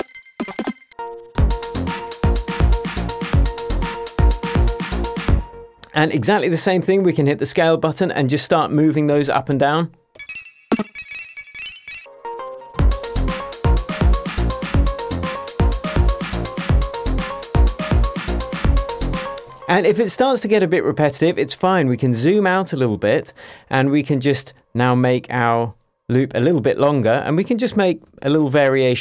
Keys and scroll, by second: 0.0-1.3 typing, 5.3 space, 9.1 p, 10.2 Up, 10.7 space, 11.1 Up, 11.5 Up, 12.7 space, 19.3 space, 20.3 shift+Tab, 28.0 super+d.